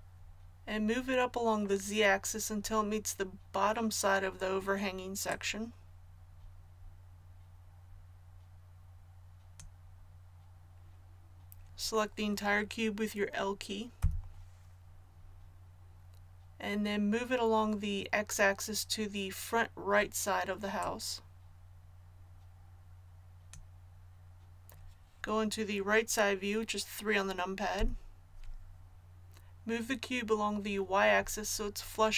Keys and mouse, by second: 5.2-13.9 drag, 13.9 l, 20.8-23.5 drag, 27.7 KP_3.